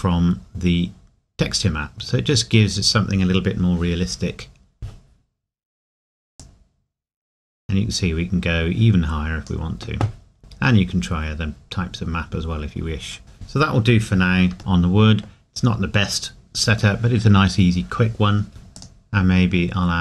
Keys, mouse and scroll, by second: 1.9 scroll up 1, 6.4 click, 10.3-11.2 scroll down 1, 14.6 middle click, 18.6 scroll down 1, 18.8 click.